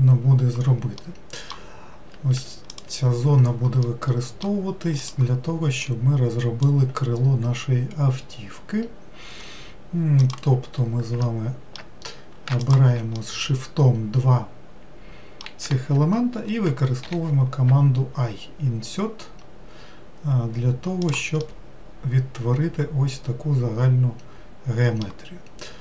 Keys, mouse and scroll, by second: 1.0-2.3 middle drag, 2.3 3, 2.7 click, 3.8-5.0 middle drag, 5.0 click, 5.8 click, 10.2 click, 11.2 alt+middle click, 12.6 shift+click, 13.1-16.3 middle drag, 21.4-24.5 middle drag.